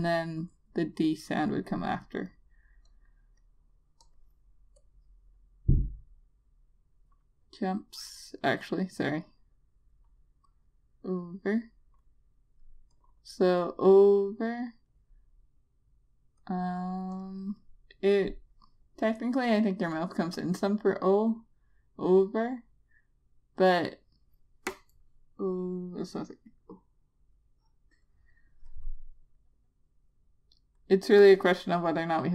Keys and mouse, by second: 17.1 click, 29.6 click.